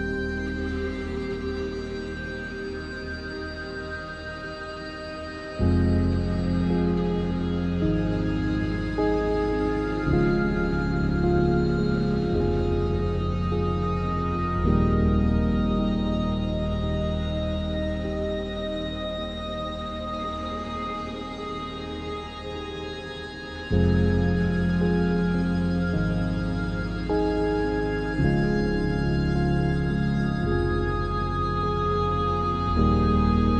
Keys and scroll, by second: 20.0 Return.